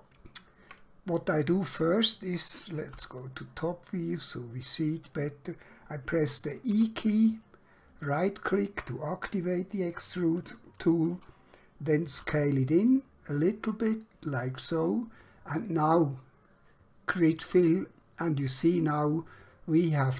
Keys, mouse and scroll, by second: 2.9 KP_7, 6.9 e, 8.0 right click, 12.2 s, 14.1 click.